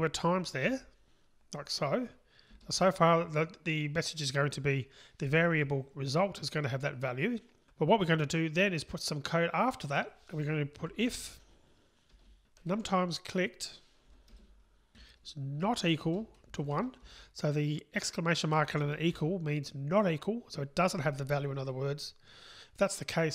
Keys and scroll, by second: 14.4 Return.